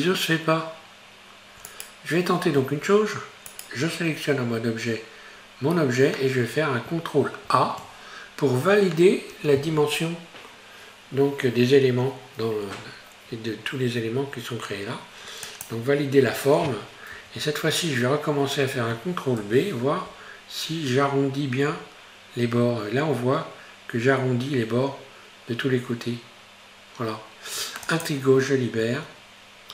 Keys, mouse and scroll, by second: 2.6 Tab, 3.5 right click, 7.4 ctrl+a, 17.2 Tab, 19.4 ctrl+b, 28.9 Tab, 29.3 scroll down 2.